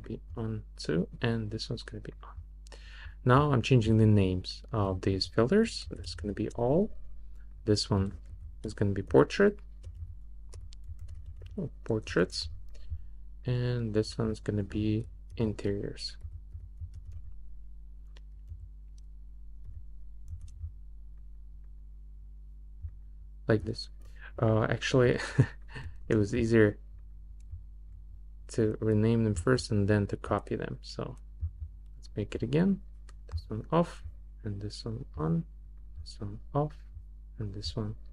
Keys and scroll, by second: 5.6-6.5 typing, 8.3 super+a, 9.1-12.0 typing, 15.3-18.5 typing, 19.7 r, 20.3 s, 26.0 BackSpace.